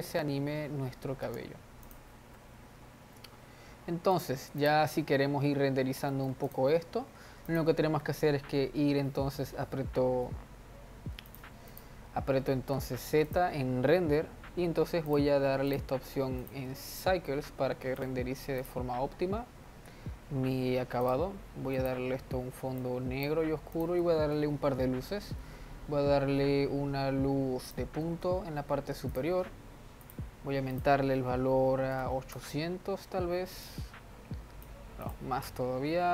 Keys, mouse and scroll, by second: 0.3 space, 1.8 space, 2.2 click, 2.7 z, 5.0 click, 5.6-6.5 scroll down 1, 6.5-6.9 middle drag, 6.9-8.0 drag, 8.4 z, 12.1 click, 13.1 z, 15.5-21.7 drag, 22.3 click, 24.3 click, 24.6 shift+a, 28.6 g, 30.6-32.6 drag, 32.6 0, 34.2-36.1 drag.